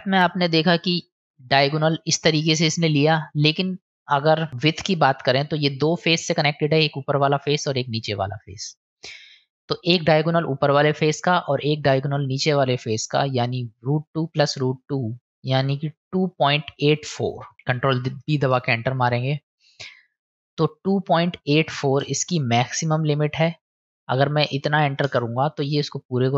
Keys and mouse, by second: 3.4 middle click, 4.9 middle click, 7.6-9.1 middle drag, 17.9 ctrl+b, 20.2-25.8 drag.